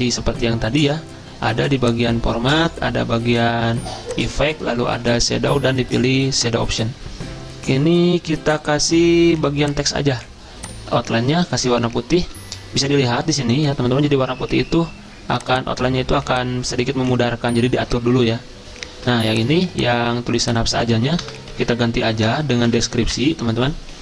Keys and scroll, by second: 21.3 BackSpace, 21.9 BackSpace, 22.7 Delete, 23.1 Return.